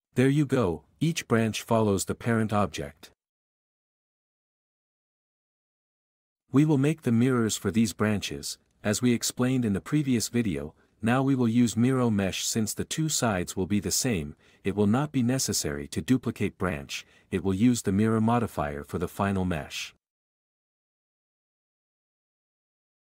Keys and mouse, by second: 0.6 g, 1.5 Escape, 4.7 q, 5.5 g, 6.0 Escape, 10.7 shift+middle click, 20.2 click, 22.8 q.